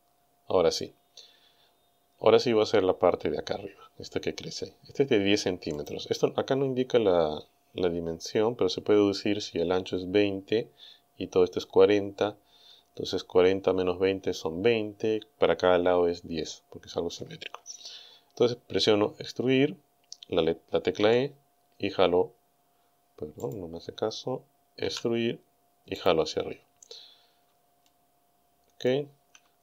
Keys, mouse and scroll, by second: 5.8 click, 6.8-7.6 scroll down 3, 12.2-12.8 scroll up 2, 21.0 e, 23.4 click, 24.8 e, 26.0 click, 27.9-29.1 shift+middle drag.